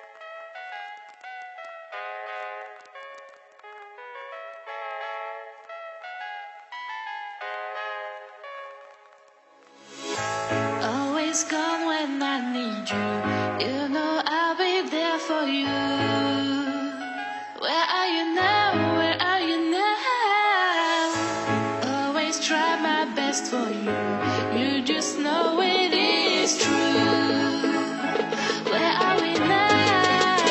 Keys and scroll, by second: 25.4 ctrl+-, 26.1 ctrl+=, 26.7 ctrl+=.